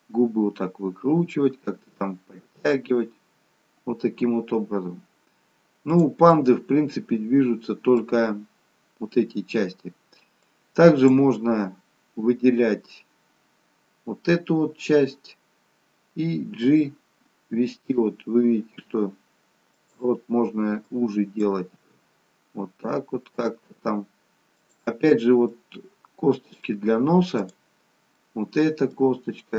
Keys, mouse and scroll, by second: 6.3 middle click, 10.5 click, 21.0 click, 22.0 g, 25.6 middle click, 27.5 click, 28.2 middle click.